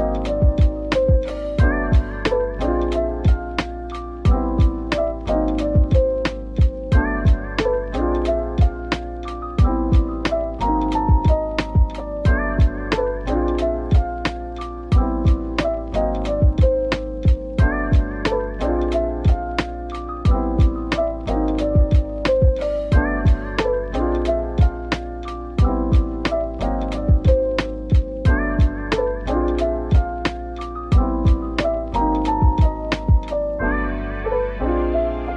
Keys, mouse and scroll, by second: 0.5-1.4 typing, 2.7 Tab, 3.1 middle click, 3.6-4.0 scroll up 1, 4.0 middle click, 4.7-6.2 scroll down 1, 6.2 typing, 8.2 middle click, 9.7 typing, 10.1 scroll up 1, 10.6 middle click, 11.4 Tab, 12.1 middle click, 13.3 ctrl+r, 14.0-14.7 scroll up 1, 14.9 double click, 15.2 middle click, 16.4 typing, 17.2 middle click, 18.4 alt+click, 19.6 middle click, 20.1-21.0 typing, 22.2 middle click, 23.6-25.7 typing, 28.1 typing, 32.0-32.3 scroll down 1, 32.3 middle click, 34.3 right click.